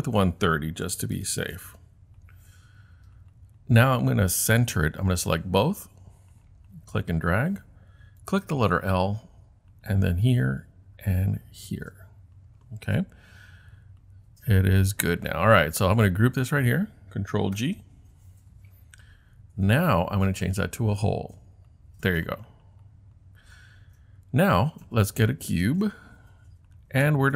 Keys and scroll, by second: 0.6-1.9 typing, 17.6 super+g.